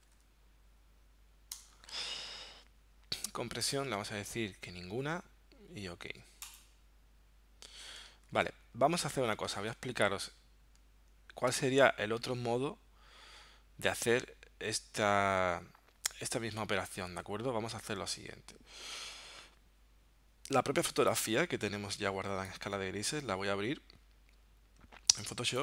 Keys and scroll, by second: 0.0-0.2 typing, 1.6 Return, 8.3 super+w, 9.6 super+Tab.